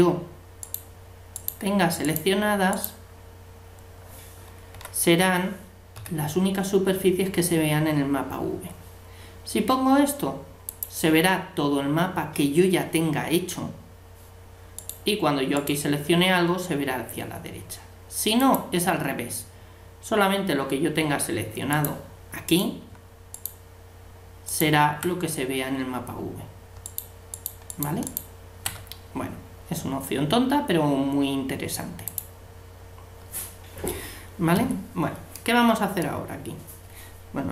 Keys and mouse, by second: 4.7 l, 6.0 a, 10.7-12.5 drag, 14.7-17.3 right drag, 18.4-20.1 drag, 21.7-23.7 drag, 22.5-26.4 right drag, 26.8-29.8 right drag, 32.1-33.7 drag, 33.8 click, 34.5 a.